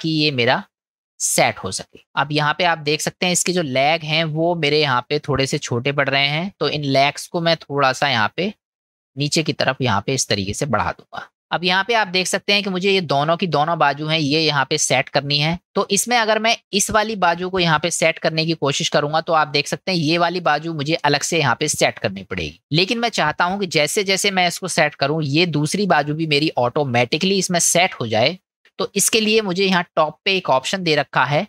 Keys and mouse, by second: 2.0 middle click, 4.1 middle click, 5.6 middle click, 7.0-8.2 drag, 9.2-10.8 drag, 11.3 ctrl+z, 12.4 middle click, 14.8 middle click, 15.6 middle click, 18.9 click, 29.0 ctrl+z.